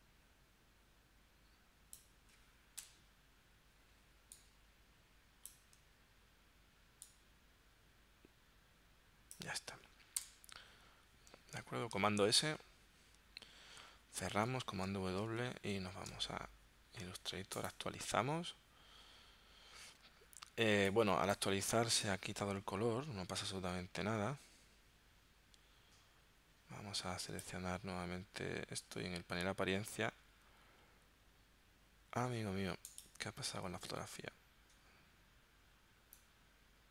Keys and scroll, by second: 2.9 Return, 10.2 Return, 12.4 super+s, 14.4 super+w, 15.3 super+Tab.